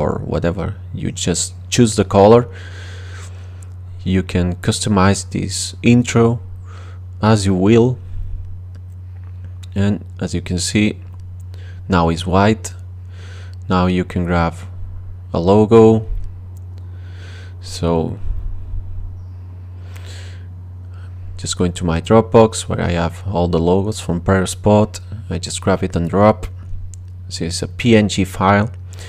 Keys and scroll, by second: 17.0-18.3 typing.